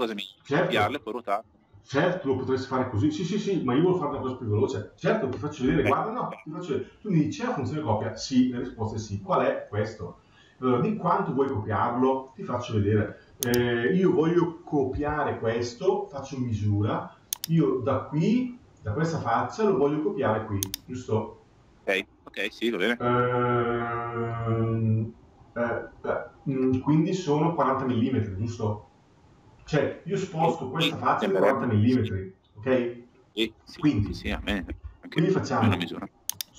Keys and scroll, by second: 33.8 Escape.